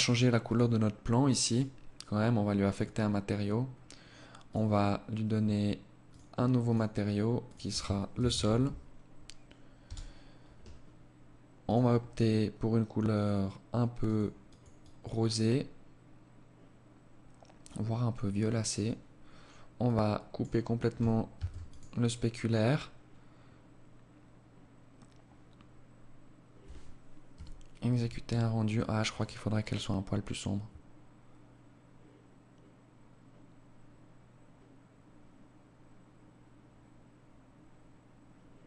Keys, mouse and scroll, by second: 0.1-0.4 scroll down 2, 0.4 right click, 1.7 click, 2.2 scroll up 3, 2.6-3.3 scroll down 1, 3.3 scroll up 1, 3.4 click, 5.6 click, 6.4 click, 10.6 click, 18.8 click, 20.3 ctrl+s.